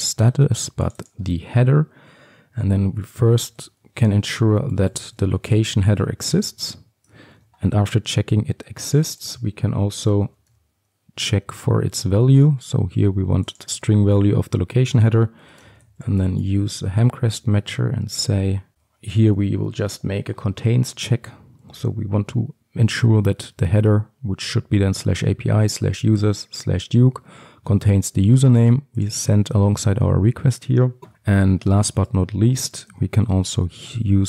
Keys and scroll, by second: 3.1 Return, 7.4 ctrl+d, 11.5 Return, 17.5 Return, 31.7 Tab.